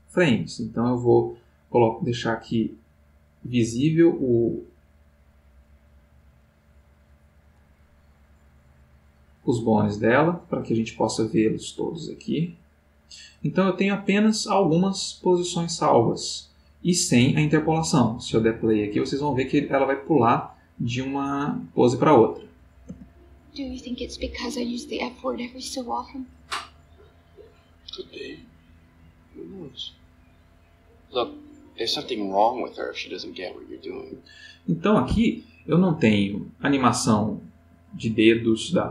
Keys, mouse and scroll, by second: 4.8 click, 6.4 click, 12.6 click, 16.6 click, 20.7 click, 22.9 space, 33.9 Escape, 36.3-37.6 drag.